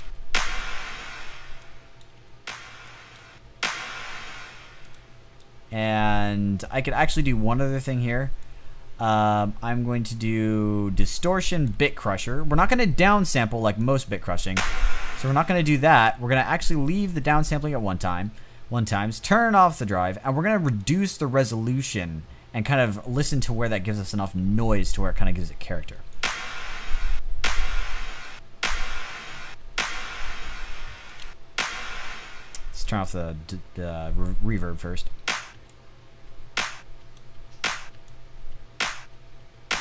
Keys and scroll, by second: 0.5 space, 1.7 space, 2.7 space, 2.8 space, 3.7 space, 13.7 space, 14.4 space, 25.4 space, 26.4 space, 27.6 space, 27.8 space, 28.8 space, 30.6 space, 30.8 space, 31.4 space, 35.7-39.8 typing.